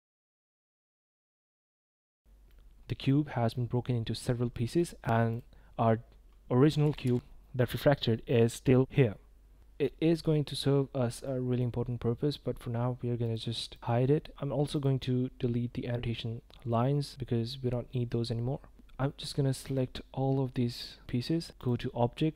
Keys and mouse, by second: 2.4-3.0 drag, 3.5-4.1 drag, 4.5 drag, 6.1 g, 6.3 y, 10.1 drag, 10.3 middle drag, 11.2-11.6 middle drag, 13.2 click, 13.7 click, 14.7 click, 19.3-20.2 drag, 20.6 middle drag, 20.8 click, 20.9 middle click, 21.1 middle drag, 21.1 click, 22.1-22.3 drag.